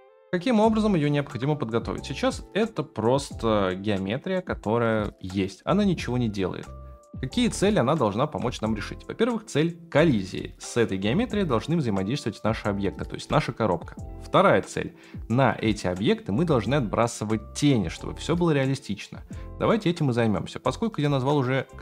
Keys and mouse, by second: 0.5 middle click, 2.0 shift+middle click, 2.8 middle click, 4.3 middle click, 8.4 KP_0.